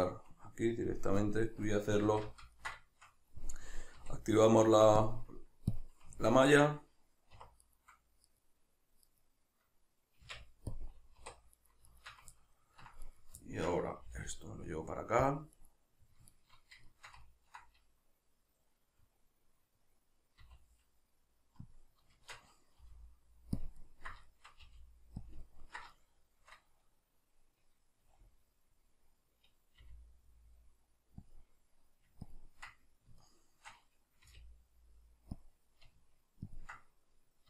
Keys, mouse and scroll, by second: 1.2-2.1 drag, 2.1 alt+q, 2.6-5.0 ctrl+middle drag, 4.0 q, 5.0-6.2 drag, 6.2-7.6 ctrl+middle drag, 7.4 1, 7.6 right click, 8.3 right click, 9.1 right click, 10.2 Tab, 11.2 1, 11.6 right click, 11.9 shift+right click, 12.4-13.1 ctrl+middle drag, 13.1 right click, 13.4-15.4 ctrl+middle drag, 14.0 g, 15.4 click, 15.6 right click, 16.3 shift+right click, 16.9-21.8 shift+middle drag, 20.4 e, 21.8 click, 22.2 shift+Tab, 23.7 ctrl+click, 23.8-25.4 ctrl+middle drag, 24.7 g, 25.4 click, 25.5-31.3 ctrl+middle drag, 29.8 r, 31.3 click, 32.2-33.2 ctrl+drag, 33.2-35.4 shift+middle drag, 34.2 r, 35.4 click, 36.5-37.4 ctrl+drag.